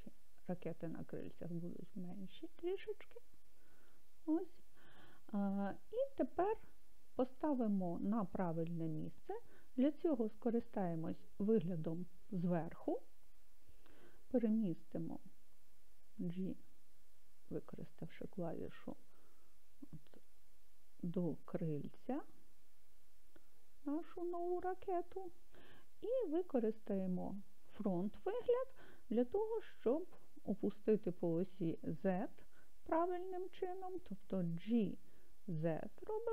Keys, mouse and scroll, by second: 3.8 click, 11.6 KP_7, 15.9 g, 24.4 click, 26.8 KP_1, 34.6 g, 35.9 z.